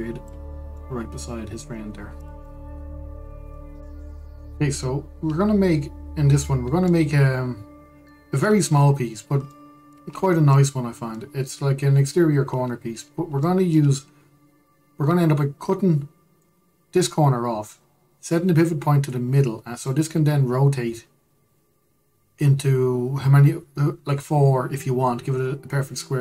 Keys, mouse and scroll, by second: 1.4-2.4 middle drag, 2.4-2.9 scroll down 1, 2.9 drag, 3.1-8.5 middle drag, 8.8-9.8 shift+middle drag, 9.8-10.2 scroll down 2, 10.2-10.8 shift+middle drag, 10.8-11.2 scroll up 2, 11.2-26.2 middle drag.